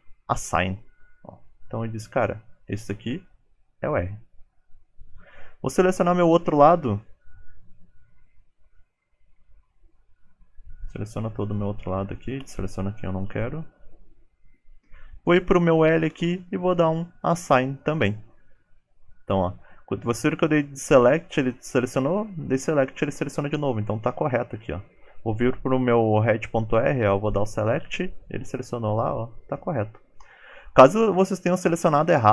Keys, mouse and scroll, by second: 1.0 ctrl+click, 4.4 shift+middle click, 4.8 click, 5.8 ctrl+click, 7.1 click, 7.9 shift+click, 11.1 shift+click, 14.7 click.